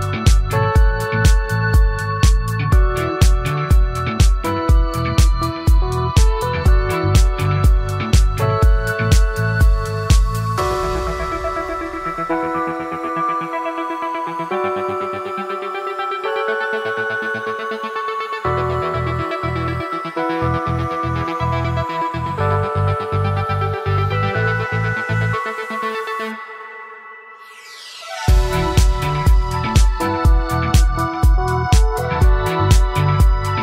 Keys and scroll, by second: 0.3 ctrl+z, 19.4 ctrl+z, 28.1 ctrl+z.